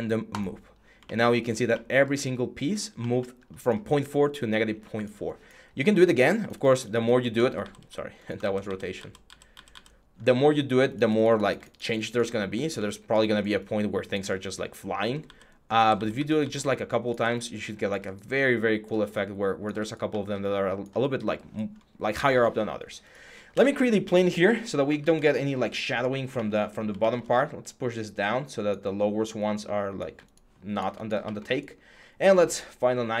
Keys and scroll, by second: 7.2 ctrl+z, 8.2 ctrl+z, 14.8 ctrl+z, 23.3 r, 24.6 w.